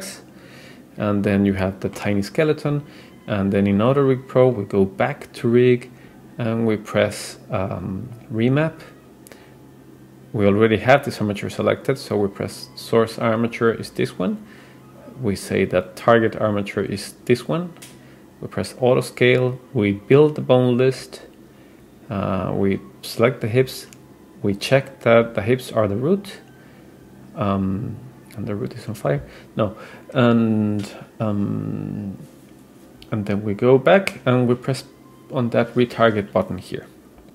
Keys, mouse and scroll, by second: 1.1-1.6 scroll up 2, 1.6 middle click, 4.3 scroll up 1, 4.5 click, 6.1-7.1 scroll down 2, 7.5-8.2 scroll down 1, 8.2 click, 8.6-9.3 scroll down 2, 13.4 click, 15.7 click, 17.8 click, 18.8 click, 20.4 click, 21.3-22.7 scroll down 4, 22.7 click, 22.7-23.1 scroll down 1, 24.6 click, 25.2-26.1 scroll down 2, 26.1-27.6 scroll down 3, 28.5-31.6 scroll down 2, 33.0-33.8 scroll up 2, 37.2 click.